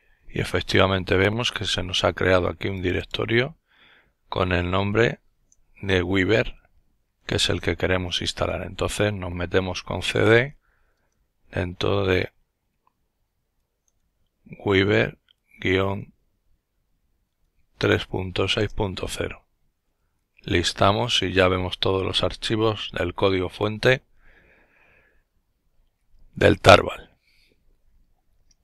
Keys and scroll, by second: 9.0-10.9 typing, 14.3 typing, 17.6 typing, 18.7-19.6 typing.